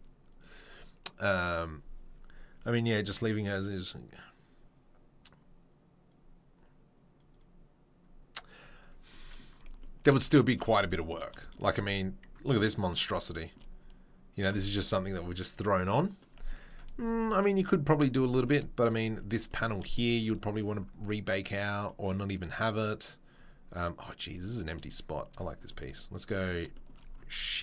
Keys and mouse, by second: 11.3-11.9 shift+right drag, 11.9-27.6 middle drag, 18.7 click, 25.3 click.